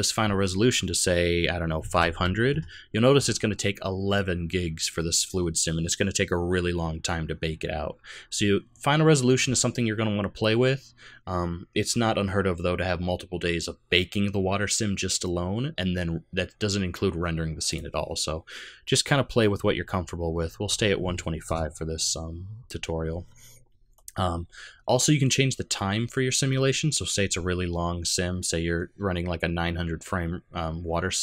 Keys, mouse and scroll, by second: 0.0 click, 2.1 KP_0, 17.7 click, 23.9-26.0 scroll down 3.